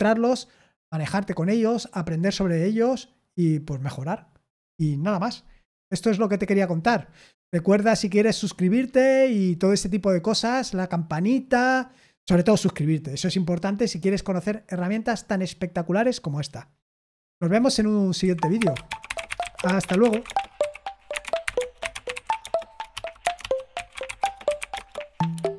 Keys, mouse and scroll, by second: 18.2 super+z, 25.5 click.